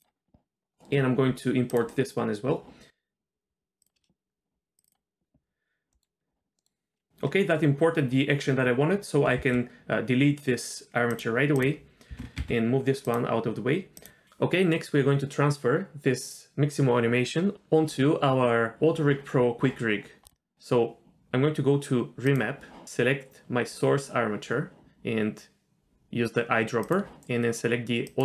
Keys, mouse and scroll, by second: 1.7-3.9 drag, 5.9 middle click, 6.6 middle click, 9.4 x, 11.6 drag, 12.1 g, 14.0 click, 20.2 drag, 22.3 click, 26.8 click, 28.1 click.